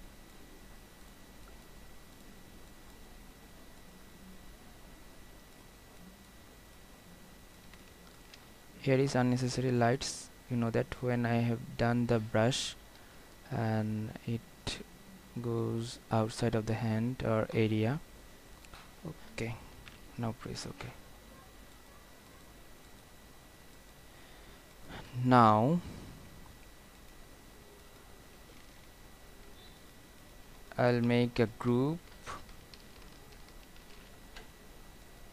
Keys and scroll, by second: 20.0 ctrl+0, 32.5 ctrl+g, 34.0 ctrl+alt+shift+e.